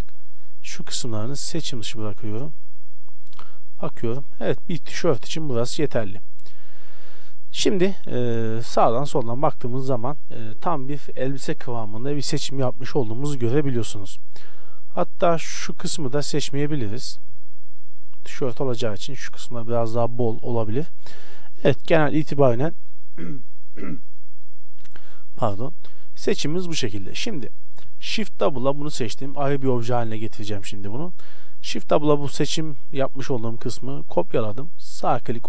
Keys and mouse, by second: 3.3 z, 3.7-5.3 middle drag, 6.4 KP_1, 9.8-13.2 middle drag, 15.3 KP_1, 15.6 z, 16.7 c, 18.0-19.8 drag, 18.2 z, 20.6-21.7 drag, 28.0 shift+d.